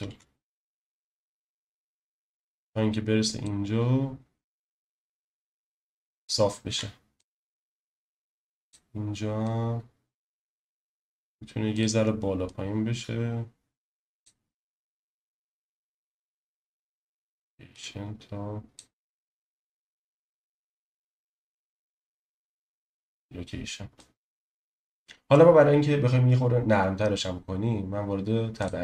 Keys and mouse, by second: 0.1 i, 1.5-3.4 drag, 4.8 click, 6.6 i, 7.9-8.7 drag, 9.5 click, 10.6 i, 12.4-14.2 drag, 15.3 click, 16.2 i, 17.7-18.8 drag, 19.6 click, 20.6 i, 24.0 click, 24.3 space.